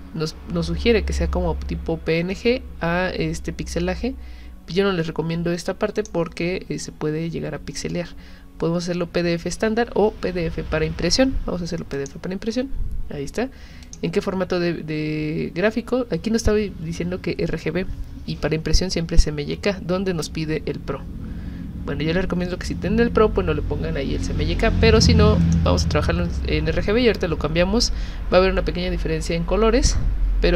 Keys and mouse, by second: 5.9 click, 11.9 click, 13.9 click, 25.4 click.